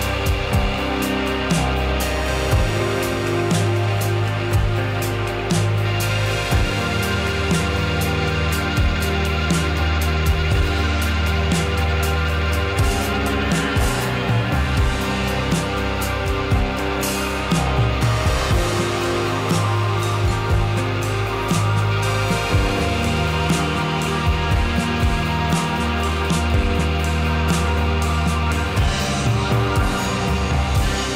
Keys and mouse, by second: 1.6 Tab, 4.1 shift+click, 4.3-4.8 middle drag, 5.5 shift+click, 5.8-6.7 middle drag, 6.9 middle drag, 7.8 ctrl+b, 11.6 right click, 13.6 Tab, 15.1-15.5 middle drag, 16.1-16.4 middle drag, 18.4-19.0 middle drag, 19.2 middle drag, 19.7 middle click, 23.5 g, 25.3 drag, 25.5-25.9 middle drag, 26.0 middle drag, 28.0 Tab, 29.0-29.4 middle drag.